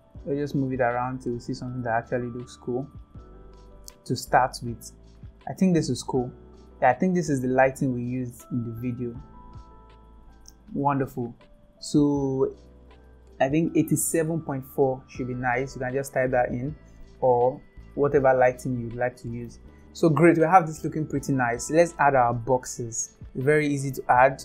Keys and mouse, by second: 8.8-10.2 drag, 14.7-15.8 drag, 18.5 shift+middle click.